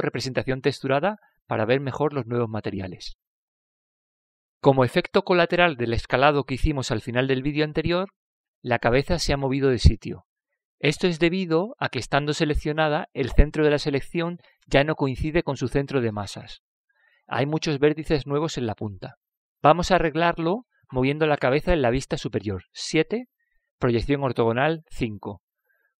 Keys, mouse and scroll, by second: 1.1 KP_Divide, 6.4-8.3 middle drag, 10.9 a, 13.0 l, 14.7-16.8 middle drag, 18.4-20.4 middle drag, 25.2 KP_7.